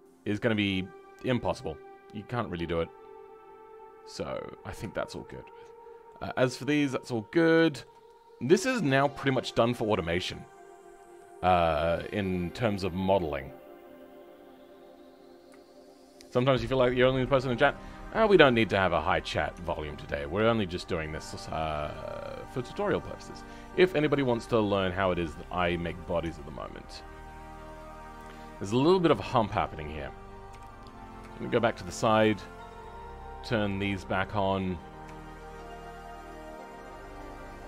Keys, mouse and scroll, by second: 4.5-4.9 scroll down 2, 4.9 shift+middle click, 5.3 scroll down 2, 5.6-17.8 middle drag, 17.8-18.6 scroll up 6, 18.6 middle click, 19.5 Tab, 19.9-22.1 middle drag, 22.1-22.4 scroll down 3, 22.4-25.4 middle drag, 26.6-29.4 middle drag, 29.4 Tab, 30.5 KP_3, 31.3-32.8 shift+middle drag, 32.8-34.5 drag, 34.5-35.1 scroll up 3, 35.1-36.5 shift+middle drag, 36.5-37.6 drag.